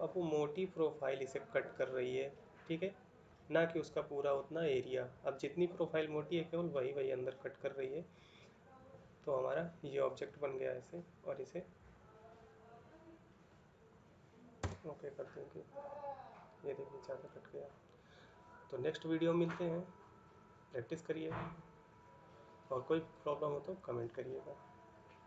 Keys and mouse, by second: 14.4 Return.